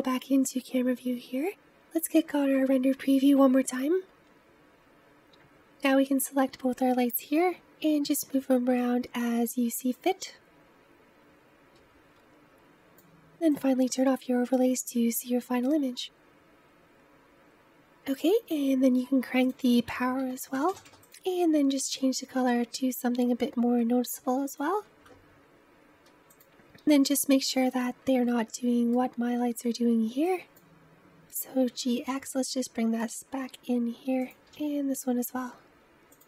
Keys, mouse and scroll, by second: 2.0 click, 7.6 g, 11.6 scroll up 1, 13.5 click, 14.7-15.4 scroll up 2, 16.7 click, 17.4-17.7 scroll down 3, 19.5-20.7 drag, 20.7 KP_0, 21.0 click, 26.6 click, 26.8 middle click, 27.7-28.2 scroll down 4, 28.9-31.0 middle drag, 31.0 g, 34.3 click, 34.5 g.